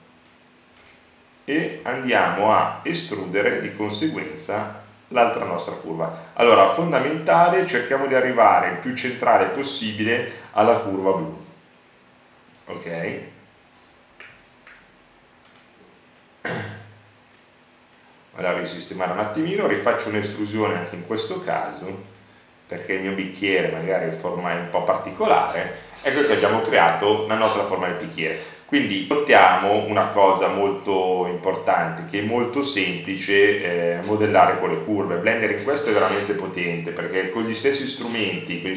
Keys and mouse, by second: 7.6 click, 9.1-10.7 drag, 11.5 e, 14.6-16.0 drag, 19.7 Tab, 21.1 Tab, 23.9 Tab, 24.7 Tab, 26.4 Tab.